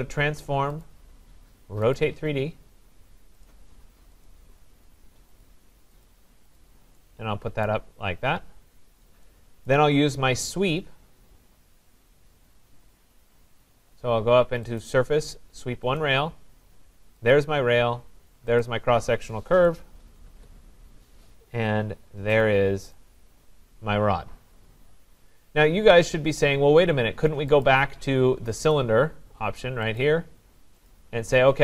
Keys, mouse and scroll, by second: 0.8 click, 2.0 click, 3.5 click, 4.3 click, 5.4 click, 6.0 click, 6.6 click, 7.7 right click, 7.9-9.3 scroll, 9.7 right click, 10.1 scroll, 14.8 click, 16.0 click, 17.3 click, 18.6 click, 19.7 Return, 20.3 Return, 22.5 click, 23.0 click, 23.3 scroll, 25.4 middle click, 27.6 click, 28.7 click, 30.0 click, 30.9 click.